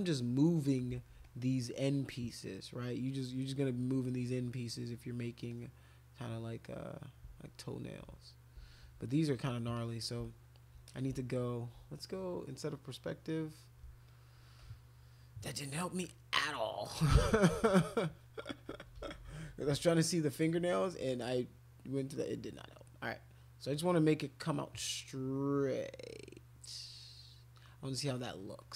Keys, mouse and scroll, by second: 0.1 click, 0.2 middle click, 0.9 ctrl+z, 1.2 click, 1.8-3.3 drag, 3.9-5.3 drag, 5.5-7.5 drag, 8.6 ctrl+z, 8.8 ctrl+z, 9.7 click, 10.8 shift+click, 13.1 click, 14.2 alt+click, 14.6 alt+click, 15.4 click, 17.1 alt+click, 18.7-19.7 typing, 21.5-24.4 drag, 25.1-28.4 drag, 28.6-28.7 drag.